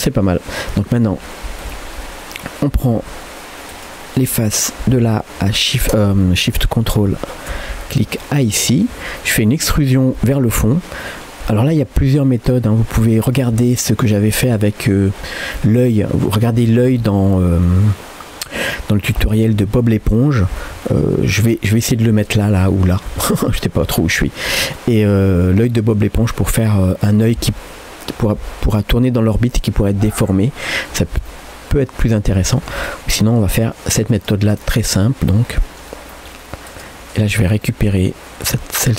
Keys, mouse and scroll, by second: 1.1-1.7 scroll up 2, 1.7 Tab, 3.0 3, 3.7 click, 6.9 ctrl+shift+click, 7.8-8.2 scroll up 2, 8.2 middle click, 9.0 shift+scroll up 1, 9.2 shift+middle click, 9.6 middle click, 12.0 e, 13.7 middle click, 25.6 middle click, 31.3 middle click, 32.9 e, 34.5-35.8 middle drag, 36.7 click, 37.4 click, 37.6 middle click, 38.5 g.